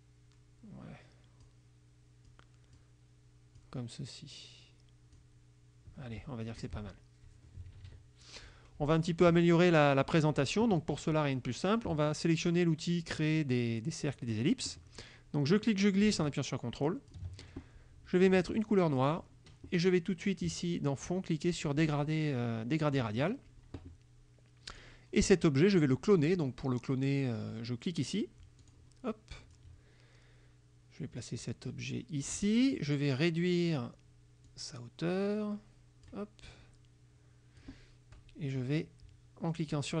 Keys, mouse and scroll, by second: 2.4 click, 3.7-5.4 drag, 6.6 F1, 6.7 click, 7.7 Right, 9.0 click, 9.4 middle click, 9.8 click, 10.3-12.3 middle drag, 14.1 click, 15.5-17.4 drag, 19.1 click, 21.9 click, 24.8 click, 28.7 click, 29.6-32.5 drag, 34.5-36.3 drag, 36.5-37.9 drag, 39.8-40.0 drag.